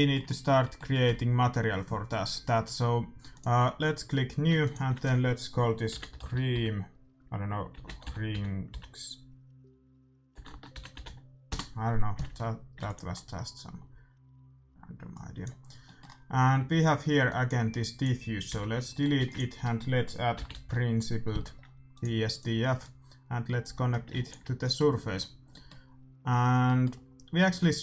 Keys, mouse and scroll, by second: 3.2-6.4 drag, 10.4 BackSpace, 12.7 ctrl+s, 13.1-15.0 middle drag, 15.0-16.8 drag, 15.6-17.7 middle drag, 17.2-19.5 drag, 18.4 x, 18.9-20.7 middle drag, 19.1 shift+a, 22.7-24.5 drag, 24.1 ctrl+s, 24.7-27.8 middle drag.